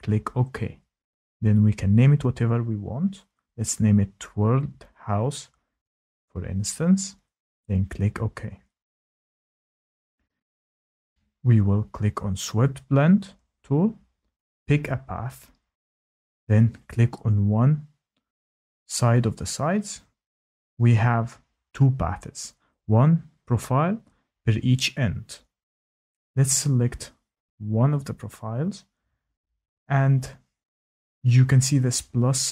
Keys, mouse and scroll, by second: 13.5 click, 15.2 click, 16.9 click, 20.2 click.